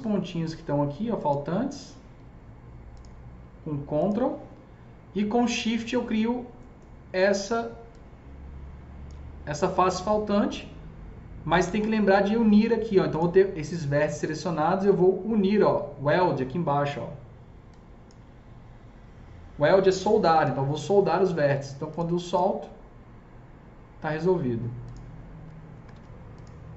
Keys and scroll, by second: 25.4 F3, 25.6 F3, 25.8 F4.